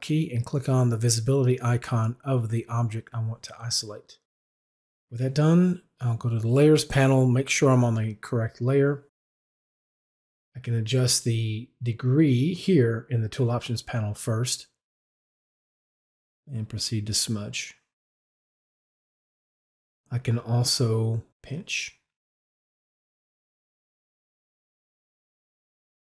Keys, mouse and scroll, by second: 0.5 alt+click, 6.3 click, 9.5 middle click, 10.0 right click, 14.7-19.3 drag, 21.3 click, 22.9 right click, 23.7-26.0 drag.